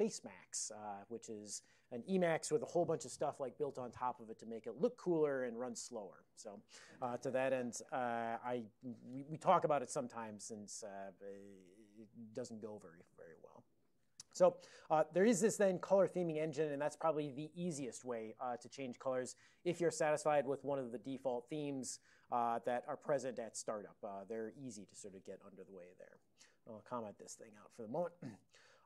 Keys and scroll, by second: 15.4 super+j, 16.6 super+j, 26.0 ctrl+a, 26.2 ctrl+p, 26.5 ;, 27.2 ctrl+x, 27.3 ctrl+s, 28.2-28.8 typing.